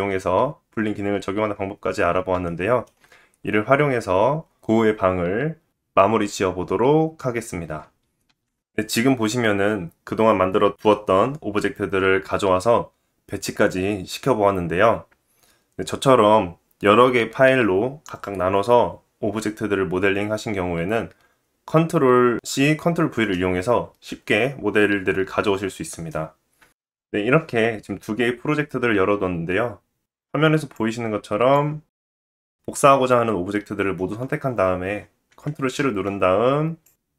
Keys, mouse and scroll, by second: 1.7-2.0 scroll down 3, 36.8 click.